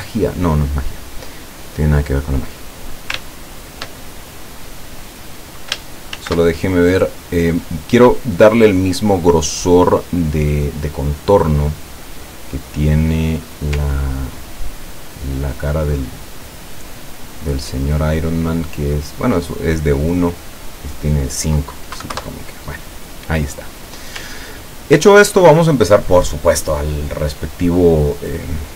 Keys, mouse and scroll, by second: 0.2 click, 1.9 click, 4.4-5.0 ctrl+scroll up 3, 5.2-5.5 ctrl+scroll down 1, 6.2 ctrl+shift+f, 11.1 click, 14.1-14.7 ctrl+scroll up 4, 15.1 ctrl+scroll down 2, 16.6 click, 17.3 click, 19.7 click, 20.9 click, 22.0 KP_1, 22.2 KP_Enter, 23.8 click, 24.4-24.8 ctrl+scroll down 2.